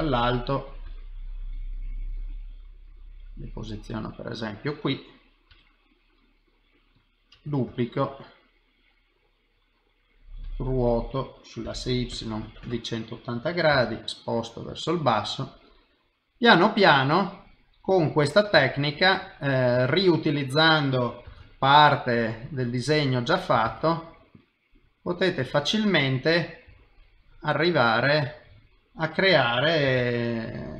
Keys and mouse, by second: 0.8 g, 3.6 middle click, 5.5 g, 7.3 shift+d, 8.4 middle click, 10.4 r, 15.2 middle click, 18.2 click, 18.7 shift+click, 19.0 middle click, 19.9 middle click, 21.3 shift+d, 22.8 middle click, 23.7 shift+d, 24.5 middle click, 26.7 s, 27.4 middle click, 29.9 shift+d.